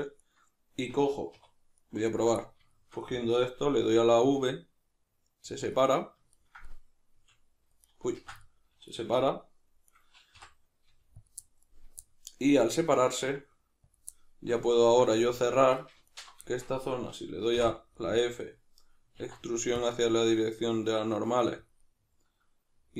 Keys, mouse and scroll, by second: 0.2 right click, 1.3 2, 1.8 right click, 2.1 ctrl+right click, 2.4-5.6 middle drag, 3.9 v, 5.6 click, 5.7-8.0 middle drag, 7.1 v, 8.0 right click, 8.2 ctrl+z, 8.4-10.0 middle drag, 9.1 g, 10.0 right click, 10.3 o, 11.3 click, 11.4-12.6 middle drag, 12.6 right click, 13.0 shift+right click, 13.3 g, 14.0 click, 14.1-16.0 middle drag, 16.0 alt+right click, 16.4-21.7 shift+middle drag, 17.6 f, 19.2 alt+e, 21.7 click, 21.9-22.9 middle drag.